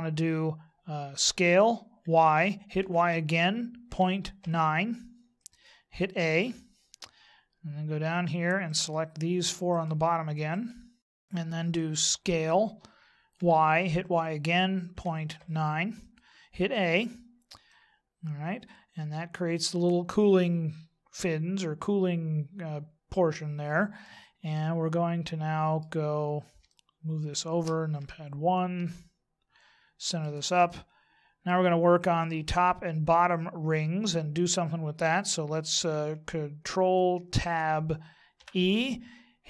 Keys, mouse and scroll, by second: 1.3 s, 6.1 a, 6.5 middle click, 8.7 right click, 9.7 shift+right click, 10.5 right click, 11.0 right click, 12.4 s, 16.7 a, 17.7 middle click, 24.5 middle click, 26.7 shift+middle click, 27.9 KP_1, 28.9 shift+middle click, 30.6 middle click, 37.1 ctrl+Tab.